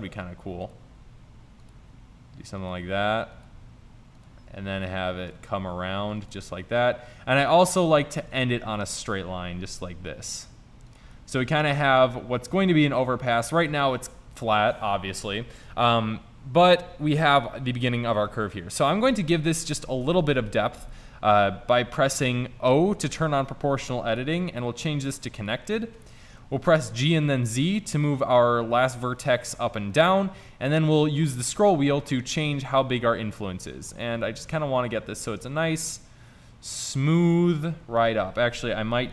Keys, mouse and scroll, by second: 1.0 e, 1.8 e, 2.8 e, 3.6 e, 4.5 e, 5.5 e, 6.5 e, 6.5 e, 8.6 ctrl+z, 9.2 e, 11.2 click, 18.3-19.2 middle drag, 20.4 KP_5, 22.8 o, 27.0 g, 38.6 ctrl+z.